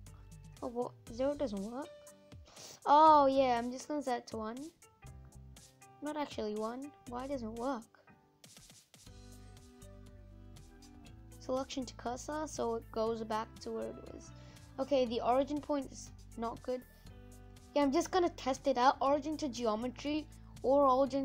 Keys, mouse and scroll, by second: 0.0-3.8 scroll down 5, 3.8 click, 4.2 middle click, 5.1-6.0 scroll down 3, 11.5 shift+s, 11.8 scroll up 1, 12.0 middle click, 12.8-13.4 scroll up 6, 13.4-19.1 middle drag, 19.1 right click, 19.5 scroll down 1, 19.6-21.2 middle drag.